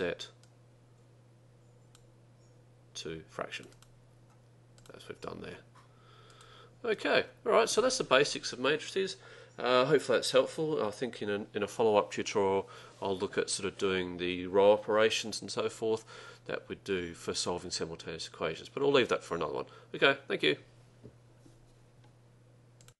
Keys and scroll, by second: 0.6 Down, 3.6 Right, 3.8 Right, 4.9 Return.